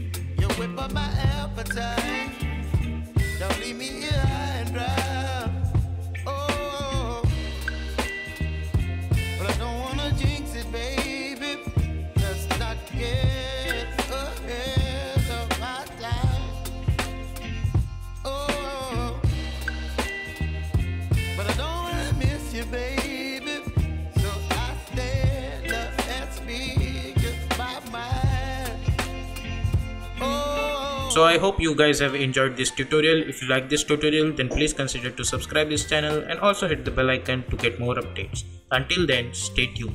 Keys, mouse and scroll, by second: 0.3 ctrl+a, 0.8 click, 4.8 space, 8.1 space, 9.0 click, 9.4 space, 11.5 click, 19.3-23.8 drag.